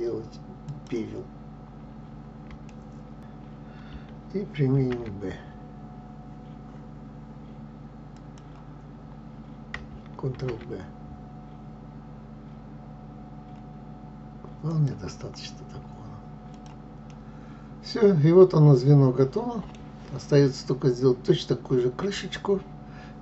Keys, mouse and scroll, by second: 1.5 scroll down 2, 2.3 shift+middle click, 3.2 alt+shift+click, 4.3 ctrl+b, 9.7 ctrl+b, 14.9-15.5 scroll down 5, 16.0 click, 16.6-23.2 middle drag.